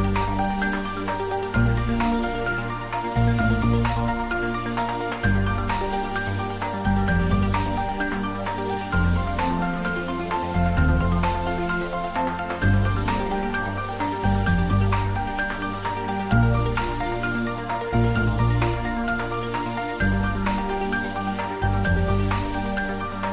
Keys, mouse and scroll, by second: 1.0-2.1 scroll down 1, 2.1-4.4 scroll up 1, 6.9-8.9 scroll down 1, 8.9 click, 9.8-11.5 scroll up 1, 15.2-15.8 scroll up 1, 18.0-19.9 scroll down 1, 21.6-22.2 scroll down 1.